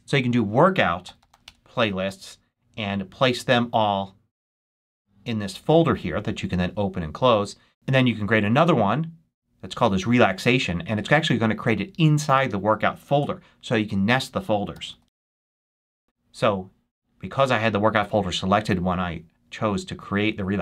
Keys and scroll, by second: 0.0-1.7 typing, 14.4-16.0 typing.